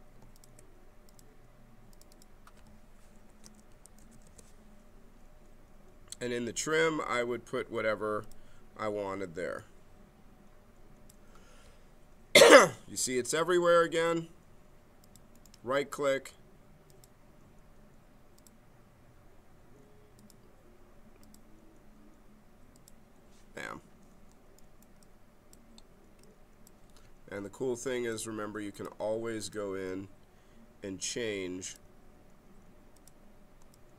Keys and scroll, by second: 3.0-4.4 typing.